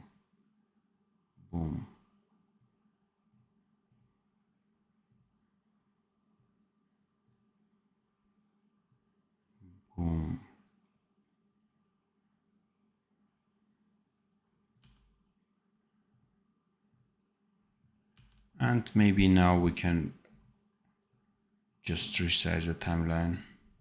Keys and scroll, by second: 14.7 d, 18.0 d.